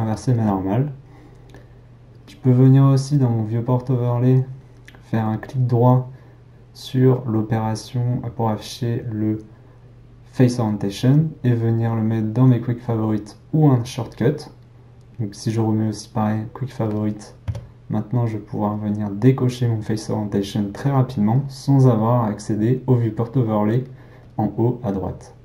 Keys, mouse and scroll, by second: 0.1-18.7 shift+middle drag, 18.7 q.